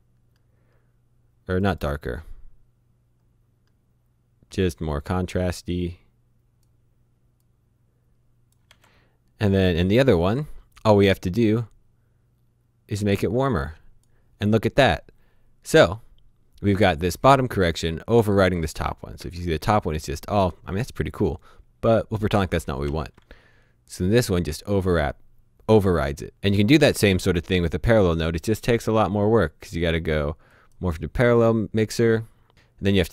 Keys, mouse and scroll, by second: 1.5 click, 3.1-4.7 scroll up 1, 4.9 click, 8.7 shift+h, 10.1 click, 17.0 click, 19.2 shift+h, 22.3-22.9 typing, 26.3 click, 28.1 right click, 30.5 click, 32.5 click.